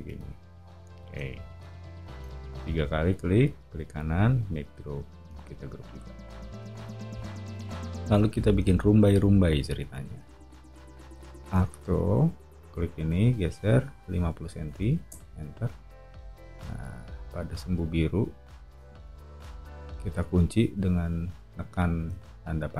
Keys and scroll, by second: 0.0 space, 0.8 o, 2.1 space, 6.6 o, 11.4 a, 14.1-15.0 typing, 15.1 Return, 19.2 Up, 21.2 Up, 22.1 Up.